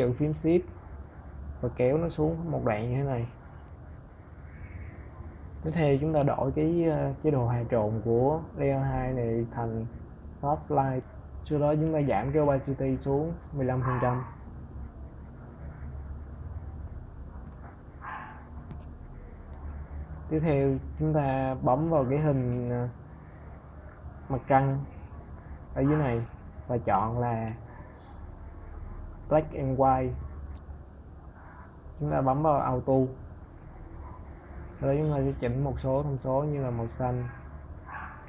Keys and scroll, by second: 13.5 Right, 14.3 BackSpace, 15.6 1, 16.9 Return.